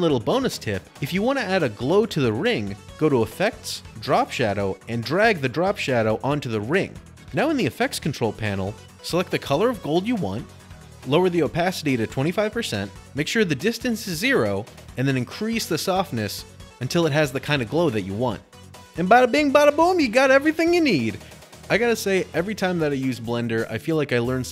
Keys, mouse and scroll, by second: 2.5 click, 3.0 click, 3.7-4.1 typing, 6.7 click, 7.0 scroll, 7.2 click, 19.2-21.1 drag, 21.8 click, 21.9 Delete, 22.1 click, 22.4 Delete, 22.5 a, 22.9 click, 23.3 middle click, 23.4 scroll, 23.5 middle click, 23.9 middle click, 24.1-24.5 scroll, 24.3 shift+middle click.